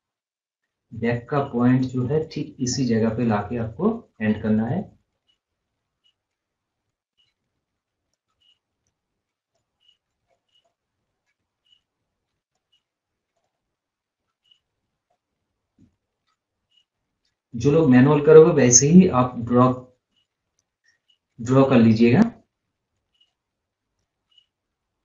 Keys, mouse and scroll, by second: 0.0 scroll down 1, 2.0 click, 3.4 scroll, 3.5 scroll up 1, 4.0 scroll up 1, 4.1 scroll down 1, 6.7 click, 8.0 click, 8.7 right click, 9.4 click, 10.9 scroll up 1, 10.9 scroll, 12.2 scroll down 1, 12.4 click, 13.6 scroll down 1, 13.7 scroll up 1, 15.3 click, 17.2 scroll up 1, 17.3 scroll down 1, 18.5 click, 20.5 right click, 21.3 click, 21.8 scroll up 1, 22.2 scroll down 1, 22.4 scroll up 1, 22.8 scroll down 1, 23.4 scroll up 1, 24.3-25.0 scroll down 1.